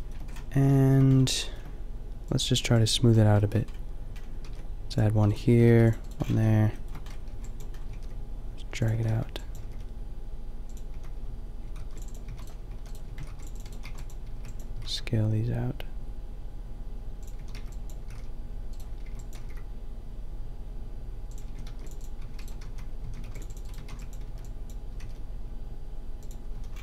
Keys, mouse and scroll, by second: 0.6 a, 4.5 ctrl+r, 5.5 a, 5.7 ctrl+r, 6.1-7.7 drag, 6.3 a, 7.2 b, 7.7 g, 8.9 a, 9.0 b, 9.6 g, 10.9 a, 11.7 ctrl+r, 12.3-14.7 typing, 13.2 ctrl+r, 17.3 a, 17.5 b, 18.0 g, 19.1 b, 19.4 g, 21.5-24.9 typing, 21.7 ctrl+r, 23.3 ctrl+r, 26.6 a.